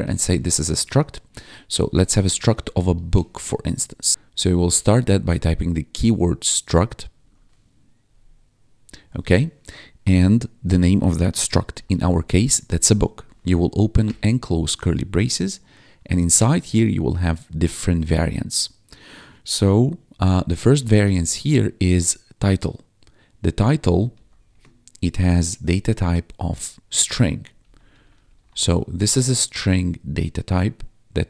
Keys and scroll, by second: 0.2 ctrl+s, 0.8 ctrl+Down, 1.5-4.1 typing, 7.2 1, 8.1 ctrl+4, 11.7 o, 12.0 k, 13.0 shift+[, 13.9 Return, 20.3-21.6 typing, 24.1 shift+;, 24.4 space, 27.3-29.4 typing.